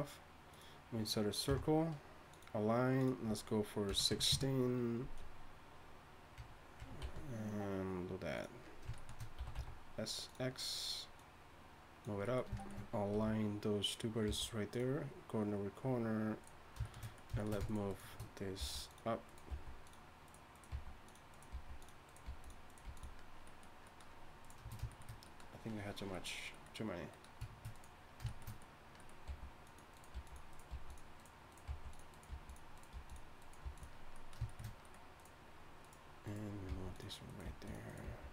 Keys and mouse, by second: 1.5 F6, 6.4 Tab, 6.8 Tab, 7.0 s, 10.0 s, 12.0 click, 13.1 r, 14.3 g, 18.6 g, 19.5 g, 20.7 g, 21.5 g, 22.2 g, 22.8 g, 25.8 click, 28.0-29.2 drag, 28.0-29.2 right drag, 29.2-33.6 typing, 34.1-37.2 drag, 36.7-38.3 typing.